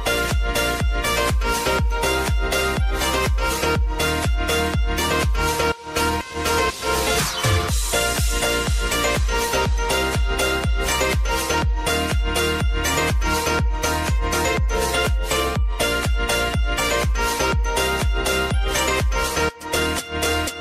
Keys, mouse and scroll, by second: 1.8 typing, 3.3-12.0 drag, 13.7 Return, 15.2 space, 17.1 j, 18.2-20.6 drag.